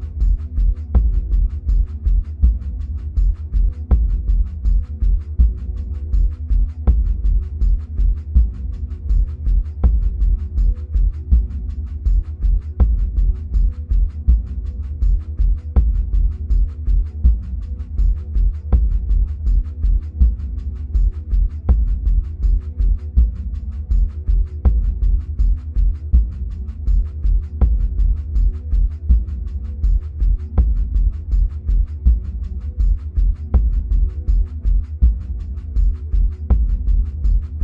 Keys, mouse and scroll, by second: 18.3 click, 21.9-24.1 scroll down 2, 24.1 click, 29.0-37.6 middle drag, 33.6-34.7 scroll up 2, 34.7-37.6 scroll down 2.